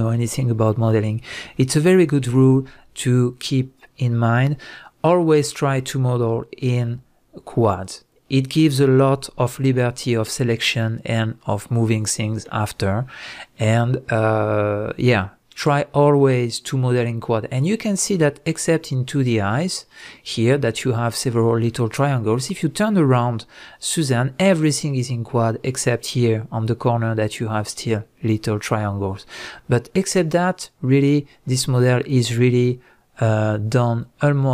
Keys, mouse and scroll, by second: 9.6 Tab, 10.1 middle click, 11.7-15.4 middle drag, 17.6 middle click, 22.4-26.4 middle drag, 28.4 middle click, 31.0-32.4 middle drag.